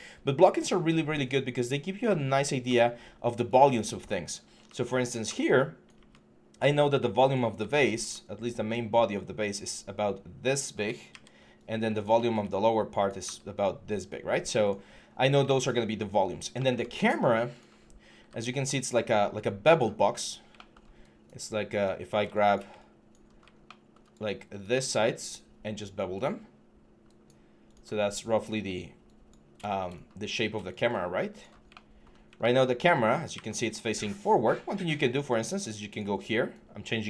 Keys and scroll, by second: 2.5 w, 5.1-5.8 typing, 7.1-8.7 typing, 10.9 ctrl+d, 13.9 typing, 18.0 w.